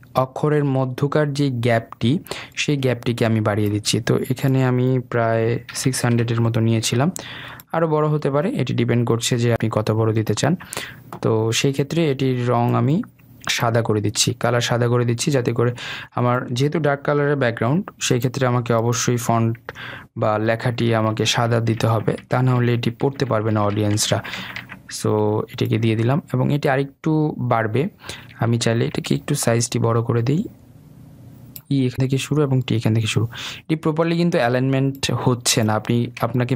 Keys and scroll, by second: 7.1 Return, 21.4 ctrl+[.